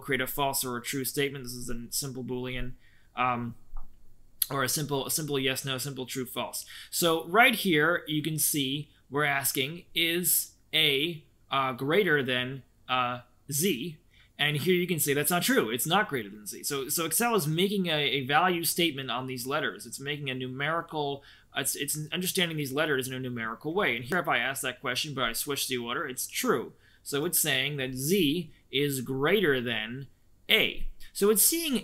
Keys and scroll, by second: 14.3 Escape, 23.6 Escape, 31.7 Escape.